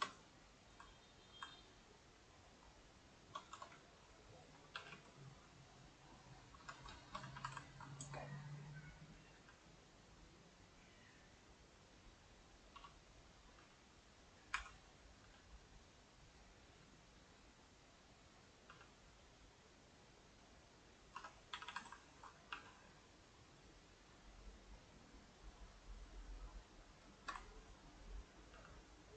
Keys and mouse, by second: 0.8-3.6 ctrl+middle drag, 3.6 Tab, 4.8 g, 6.7 Tab, 6.9 shift+middle click, 7.2 a, 7.4 a, 7.6-9.2 ctrl+middle drag, 9.2 click, 9.4 g, 14.6 r, 15.2 g, 18.7 g, 21.2 Tab, 21.5 a, 21.7 a, 22.1 ctrl+right click, 22.5 g, 26.5 middle click, 27.1 shift+right click, 27.4 ctrl+middle click, 27.9 click, 28.5 g.